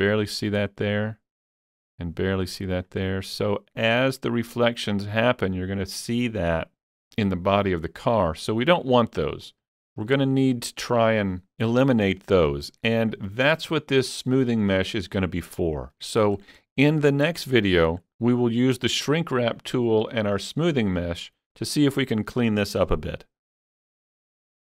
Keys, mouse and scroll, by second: 9.8-11.5 shift+middle drag, 11.6-15.0 shift+middle drag, 15.6 shift+middle click, 16.4 shift+scroll up 1, 16.7 shift+middle click.